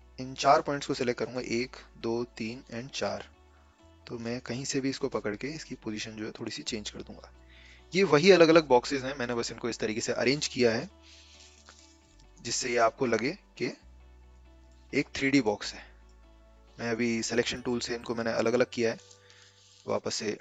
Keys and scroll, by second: 11.6 a, 14.2 v, 19.6 ctrl+z, 20.0 ctrl+z.